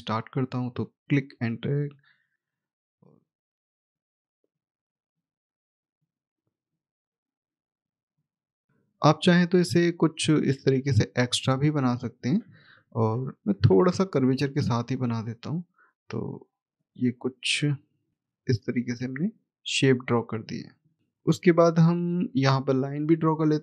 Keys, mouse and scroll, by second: 8.7-9.7 ctrl+scroll up 1, 9.7 click, 14.6 click, 21.2-21.8 scroll down 1, 21.8 middle click.